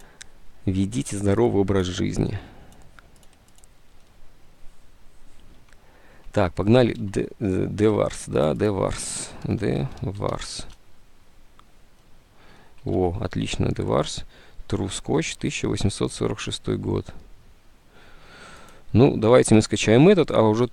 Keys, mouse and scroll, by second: 5.6 alt+Tab, 7.2 alt+Tab, 8.0 alt+Tab, 9.2-10.8 typing, 12.9-14.1 typing, 15.5 alt+Tab.